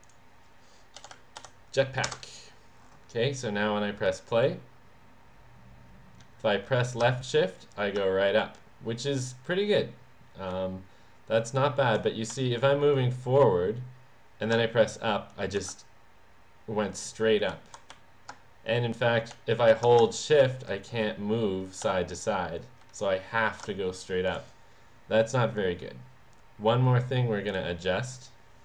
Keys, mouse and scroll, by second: 0.0 click, 1.3 t, 2.1 Return, 4.0 click, 10.6 w, 12.4 w, 17.6 w, 17.9 w, 19.4 d, 22.0 d, 24.3 click, 27.5 click.